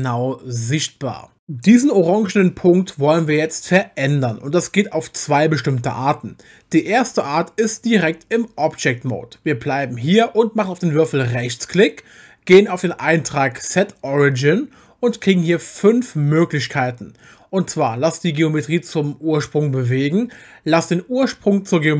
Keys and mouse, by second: 11.3-21.9 right drag.